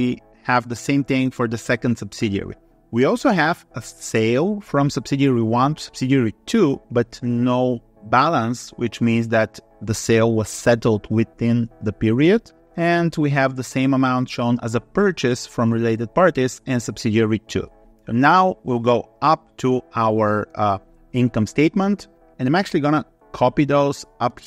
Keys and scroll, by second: 23.1 ctrl+c.